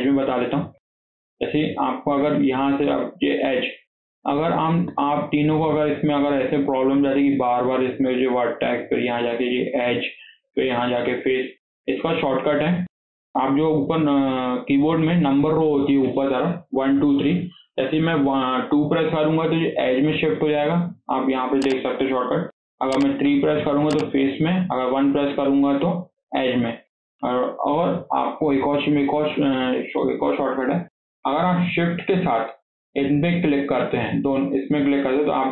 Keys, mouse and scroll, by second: 0.4 scroll up 1, 0.6 shift+middle click, 0.9 scroll down 1, 1.1-3.3 shift+middle drag, 3.3 click, 6.2 click, 7.1 click, 8.9 click, 10.3 click, 11.6 click, 12.4 scroll down 1, 12.6-15.8 shift+middle drag, 24.6 1, 28.2 shift+middle click, 28.9-29.2 scroll up 1, 29.2-32.2 shift+middle drag, 34.6 shift+click.